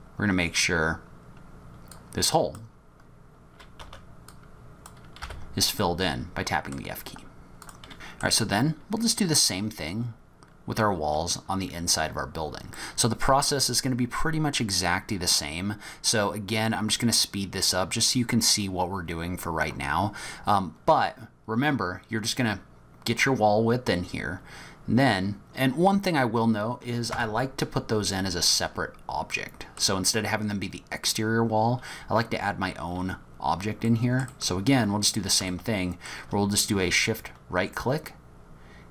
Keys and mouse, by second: 2.0 click, 3.8 2, 4.5 click, 5.2 f, 5.8 middle click, 6.7 click, 7.9 middle click, 12.8 middle click, 27.2 Tab, 29.3 middle click, 29.4 click, 29.7 middle drag, 33.9 middle click, 34.3 middle click, 35.5-36.1 shift+drag.